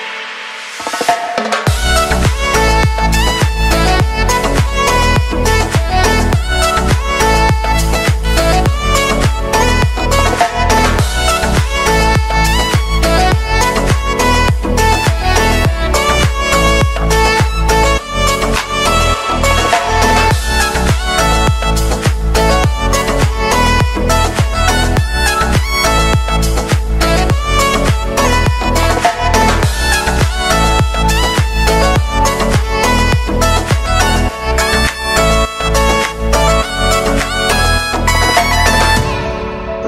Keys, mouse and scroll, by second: 3.2 click, 4.9 t, 5.7 click, 6.8 Return, 8.2 click, 8.6 ctrl+s, 11.1 click, 11.8-13.6 scroll down 1, 15.5 scroll up 1, 15.6 click, 18.4 2, 19.0 click, 20.6 space, 24.4 space, 26.1 click, 27.0 shift+click, 27.8 ctrl+shift+c, 28.2-31.0 typing, 31.9 click, 32.4 ctrl+d, 32.8 click, 33.0 s, 33.5-37.5 drag, 38.1 t, 39.2 click.